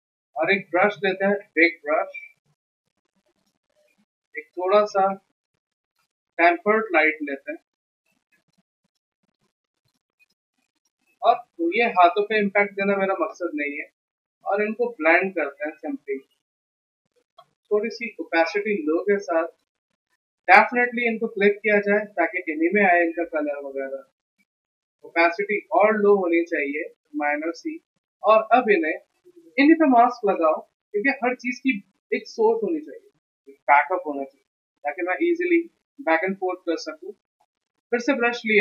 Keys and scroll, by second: 0.1 b, 11.0 v, 36.0 b.